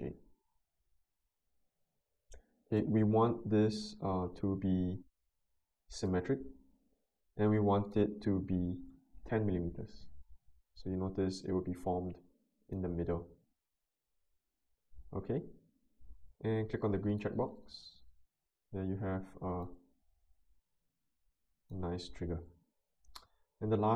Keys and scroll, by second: 9.0-9.9 typing.